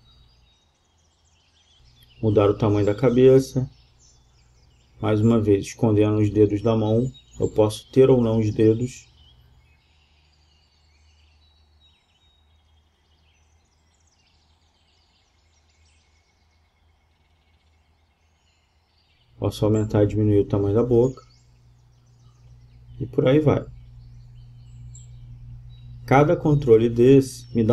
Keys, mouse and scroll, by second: 1.0 g, 2.4 g, 5.1 g, 5.7 g, 7.9 g, 14.4-16.3 middle drag, 16.3 g, 18.5-20.3 right drag, 19.3 g, 22.1 right click, 23.0-23.8 right drag, 23.0 g, 24.9-26.5 right drag, 25.7 g, 26.7-27.7 middle drag.